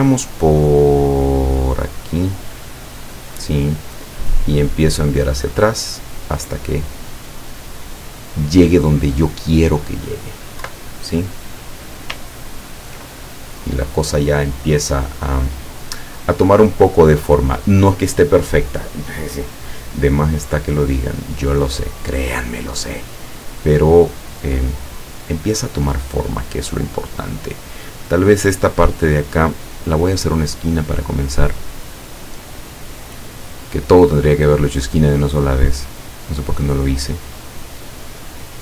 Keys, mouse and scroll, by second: 4.9 click, 5.3 click, 10.7 Left, 12.4 ctrl+scroll down 2, 19.5 click, 20.4-22.0 drag, 22.6 click, 29.4 click, 30.9 click, 32.9 click, 34.2 click, 38.0-38.6 drag.